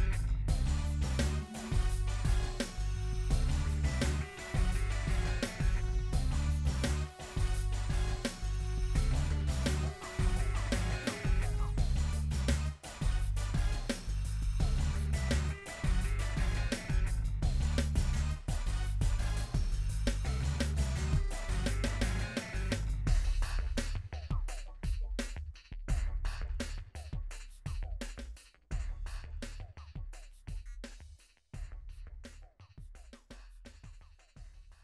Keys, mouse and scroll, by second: 1.1 shift+click, 1.4 middle click, 1.6 shift+click, 1.8 g, 2.2 middle click, 3.5 Tab, 3.7 s, 4.0 middle click, 4.5 s, 4.8 g, 5.5 shift+middle click, 5.7-6.2 scroll up 2, 6.3 KP_1, 6.7-7.0 scroll up 1, 7.0 g, 7.8 middle click, 8.7 s, 9.2 middle click, 9.4 KP_7, 11.4 g, 12.6-13.6 middle drag, 13.6 g, 14.5 middle click, 14.9 scroll down 2, 15.1 middle click, 17.6 middle click, 18.2 scroll down 1, 18.4 middle click, 18.9-19.4 scroll down 1, 20.0 middle click, 20.6-21.1 scroll up 2, 21.1 click, 21.9 click, 22.4 Tab, 22.8 middle click, 23.2-23.9 scroll up 4, 24.0 click, 24.6 middle click, 25.0 shift+click, 25.6 ctrl+z, 25.7 middle click, 26.1 shift+click, 26.4 middle click, 26.5 scroll up 1, 26.7 shift+click, 27.0 middle click, 27.2 shift+click, 27.4 middle click, 27.7 shift+click, 27.8 middle click, 28.3-30.5 drag, 30.5 ctrl+z, 30.6 ctrl+z, 31.3 scroll down 2, 31.7 shift+middle click, 32.4 shift+3, 32.7 click, 34.0 click.